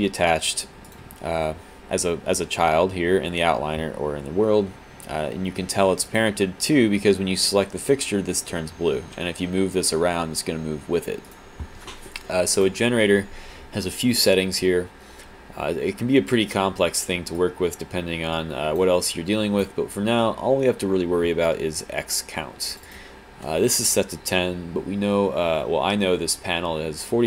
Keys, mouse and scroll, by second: 0.9 click, 6.3 click, 9.1 w, 11.4 right click, 12.7 click, 17.4 alt+click, 19.1 click.